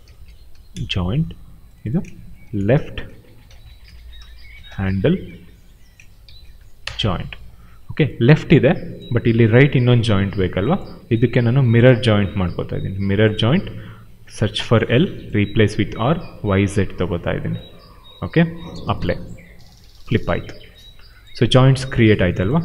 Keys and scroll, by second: 0.0-0.9 typing, 2.1-7.0 typing.